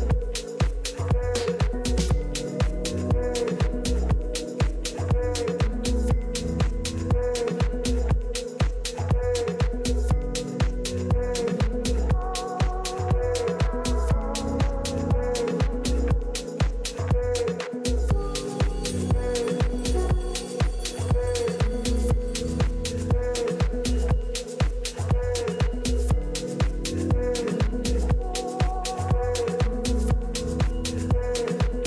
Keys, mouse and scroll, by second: 3.2-8.7 middle drag, 9.1-11.6 middle drag, 14.0 a, 14.4 a, 17.8 click, 19.7 right click, 20.4-21.5 drag, 22.8 Escape, 24.2 a, 26.6 k.